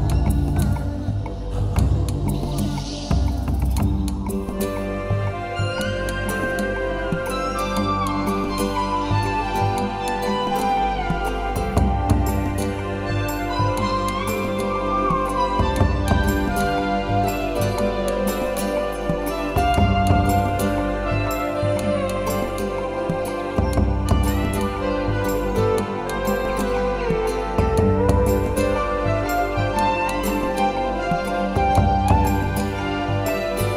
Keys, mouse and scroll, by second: 0.0 click, 0.9 Tab, 1.1 middle click, 1.9 middle click, 4.3 click, 4.7 middle click, 5.7 middle click, 6.2 shift+middle click, 6.3 shift+middle click, 6.6 ctrl+middle click, 9.0 scroll down 3, 9.3 middle click, 10.4 middle click, 11.7 Tab, 12.2 ctrl+z, 12.6 ctrl+z, 13.0 scroll down 3, 13.9 KP_1, 14.6 shift+middle click, 15.3 ctrl+r, 17.9 click, 17.9-18.8 scroll up 8, 18.3 shift+middle click, 18.8 Tab, 19.0 middle click, 19.8 shift+middle click, 20.0 scroll down 7, 20.5 middle click, 21.0 Tab, 21.2 middle click, 21.7 shift+middle click, 22.0 middle click, 23.3 ctrl+r, 26.3 click, 26.8 ctrl+r, 28.2 click, 28.7 ctrl+r, 30.4 click, 31.0 ctrl+r, 31.2 click, 32.4 click, 32.5 middle click, 32.9 Tab, 33.0 middle click.